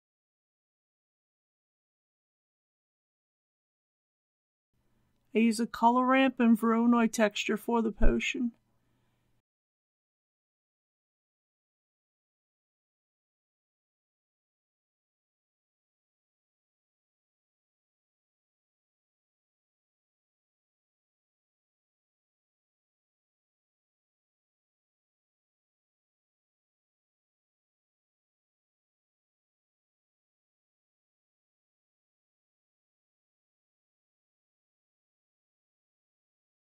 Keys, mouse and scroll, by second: 5.7 shift+a, 10.0-13.5 drag, 15.7 shift+a, 23.8-34.7 drag, 35.2 ctrl+c, 35.4-36.6 drag.